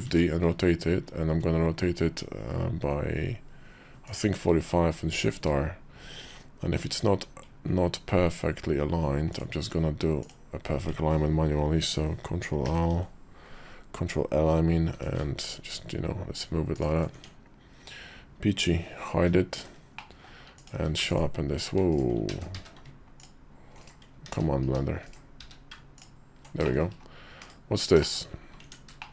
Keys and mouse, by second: 4.9 shift+r, 6.6 r, 12.4 ctrl+l, 14.7 r, 16.9 Tab, 19.3 shift+2, 19.7 middle click, 20.3 click, 20.5 q, 21.7 right click, 22.1 ctrl+z, 22.3 q, 24.0 ctrl+q, 25.2 q, 26.4 shift+click, 27.2 /, 27.8 shift+click, 28.4 Tab, 28.8 shift+click.